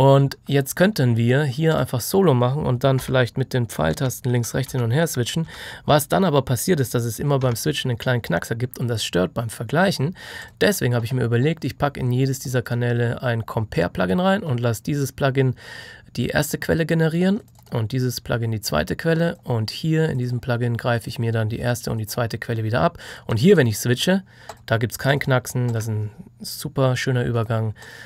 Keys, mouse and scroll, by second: 1.6 click, 10.3 click, 17.3 click.